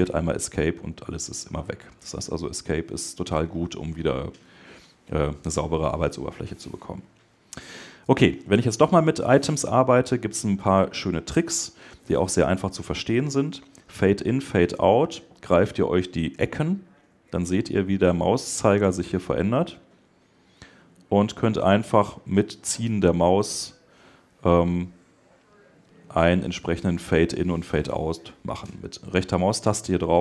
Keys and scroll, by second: 11.9 Escape.